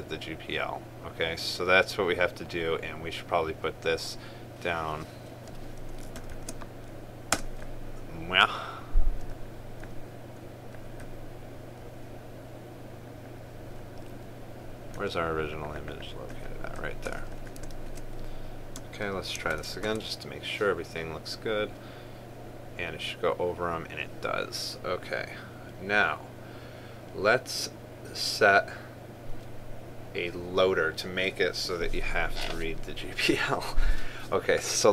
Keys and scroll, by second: 6.8 ctrl+c, 18.6 ctrl+v, 20.0 ctrl+s, 20.5 ctrl+r.